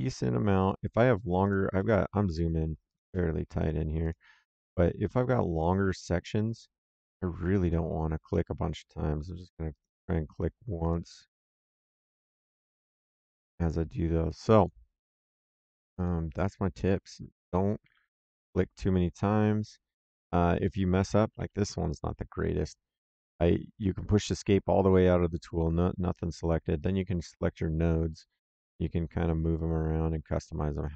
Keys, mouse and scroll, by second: 0.6 click, 1.7 middle click, 2.8 click, 4.4 Escape, 5.5 click, 8.2 middle click, 9.6 click, 10.7 click, 11.7 Escape, 12.6 click, 14.5 click, 15.9 click, 17.4 click, 17.8 Escape, 18.2 middle click, 20.5 middle click, 21.1 Escape, 24.2 Escape, 26.7 click, 29.5 click.